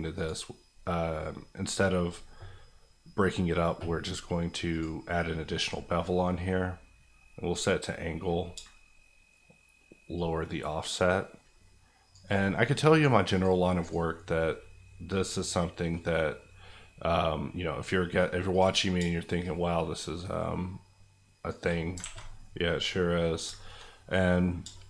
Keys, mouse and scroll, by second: 0.1 click, 6.1 middle click, 6.6-7.5 scroll up 1, 7.5 click, 8.6-12.4 shift+drag, 16.3-18.5 scroll down 1, 18.5-21.6 drag, 22.0 alt+a, 22.4 scroll down 1, 22.6-24.8 middle drag.